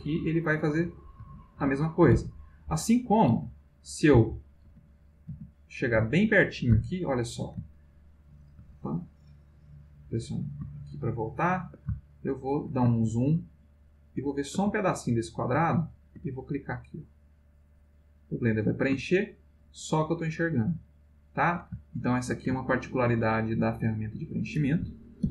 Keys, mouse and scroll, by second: 1.6 ctrl+z, 3.3 ctrl+z, 4.1 ctrl+z, 5.5 ctrl+z, 6.8 shift+middle click, 7.7-8.7 ctrl+shift+middle drag, 9.5 click, 10.8-11.8 ctrl+middle drag, 12.1 ctrl+shift+middle click, 12.9-14.7 ctrl+shift+middle drag, 14.8-16.3 ctrl+shift+middle drag, 17.2 click, 19.3-21.6 ctrl+middle drag, 21.8 ctrl+shift+middle click, 22.8 ctrl+middle click, 25.2 ctrl+z.